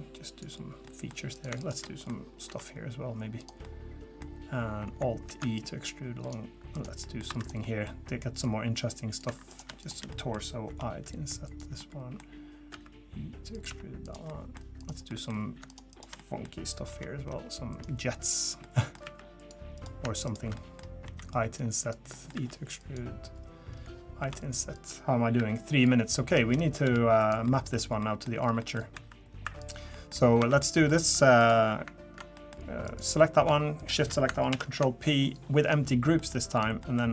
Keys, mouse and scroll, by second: 0.9 middle click, 1.3 click, 1.6 shift+click, 1.8 middle click, 2.5 i, 3.6 middle click, 5.2 alt+e, 6.7 click, 7.0 middle click, 7.3 2, 7.4 click, 7.6 middle click, 8.4 click, 9.3 3, 9.5 click, 9.8 shift+click, 10.1 middle click, 10.7 i, 11.8 middle click, 12.7 e, 13.7 s, 14.3 middle click, 14.8 click, 15.1 middle click, 15.7 shift+click, 15.9 shift+click, 16.2 middle click, 16.9 i, 18.6 middle click, 19.0 e, 19.7 click, 20.2 shift+click, 20.5 middle click, 21.0 i, 22.1 middle click, 22.3 e, 24.2 i, 25.4 e, 26.8 g, 27.5 middle click, 28.0 middle click, 28.3 scroll down 1, 28.6 middle click, 28.9 2, 29.4 3, 29.6 click, 29.9 middle click, 30.4 Tab, 30.6 middle click, 31.4 click, 32.3 middle click, 32.8 click, 33.8 shift+click, 34.5 ctrl+p, 36.2 middle click, 36.5 click, 36.8 middle click.